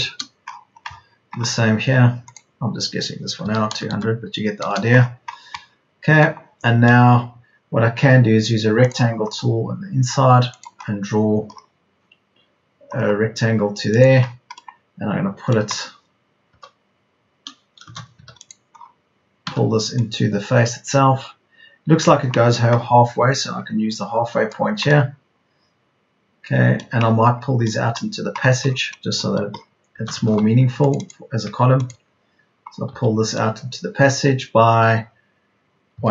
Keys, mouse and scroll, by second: 3.3 KP_2, 3.8 KP_0, 16.4 p, 17.9 space, 18.1 Escape, 19.4 p, 29.9 space, 30.1 Escape, 32.8 p, 35.9 KP_1.